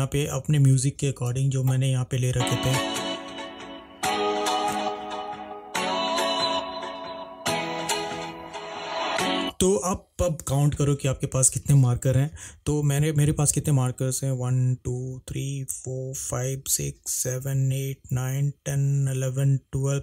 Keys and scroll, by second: 2.5 space, 9.6 space.